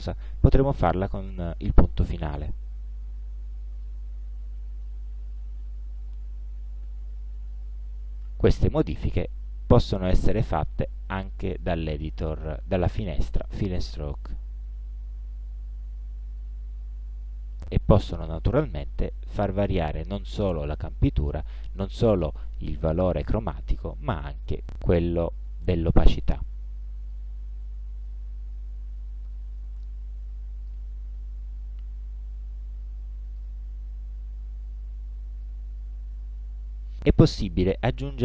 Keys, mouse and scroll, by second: 2.3 click, 3.9-5.1 middle drag, 8.4 click, 10.0-11.5 drag, 14.1-17.6 drag, 24.5-27.4 drag, 29.7-31.0 drag, 33.3 click, 34.7-35.7 drag.